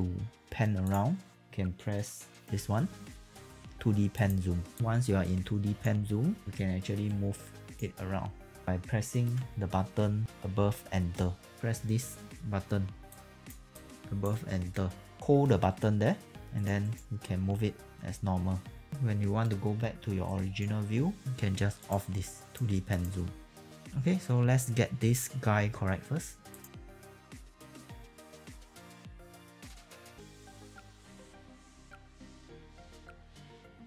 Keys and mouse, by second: 0.9 click, 4.1 click, 5.2 alt+right click, 7.0 right click, 7.9 middle click, 11.5 click, 17.0 middle click, 17.8 right click, 20.2 right click, 26.4-33.8 typing, 26.6 click, 26.7 click, 27.0 click, 27.5 click, 27.6 click, 27.7 click, 28.0 click, 28.3 click, 29.6 click, 30.2 click, 30.5 click, 30.8 click, 31.1 alt+right click, 31.3 click, 32.0 click, 32.1 click, 32.6 click, 32.8 click, 33.1 click, 33.5 alt+click.